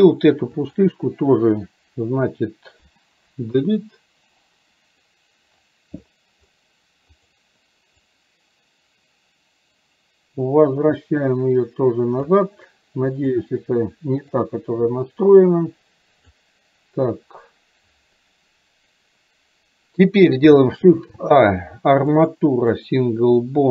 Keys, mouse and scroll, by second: 0.8 click, 7.2 click, 8.2-12.4 drag, 13.2 click, 14.3-16.4 drag.